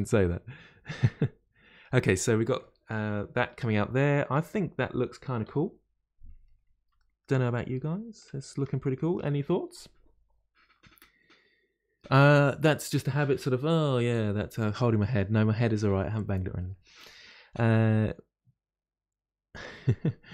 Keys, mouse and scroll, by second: 2.1-2.5 scroll down 2, 2.6-4.4 middle drag, 4.4-4.7 scroll down 4, 5.4 KP_Divide, 6.6 scroll down 2, 7.0-20.3 shift+middle drag.